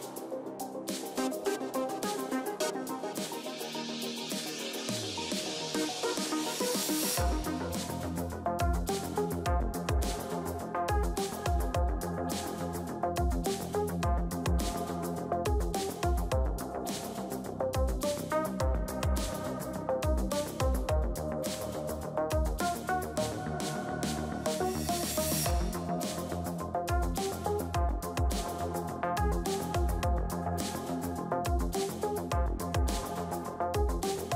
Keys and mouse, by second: 0.3 ctrl+z, 0.6 ctrl+z, 1.2 ctrl+z, 1.6 a, 2.2 b, 3.0 x, 3.8 ctrl+s, 9.1 a, 10.5-12.4 drag, 12.9 a, 13.2 ctrl+s, 16.3 KP_1, 18.1 v, 19.3 c, 24.2-26.2 right drag, 26.2 c, 29.3 right click, 29.9 middle click, 30.8 v, 31.6 c.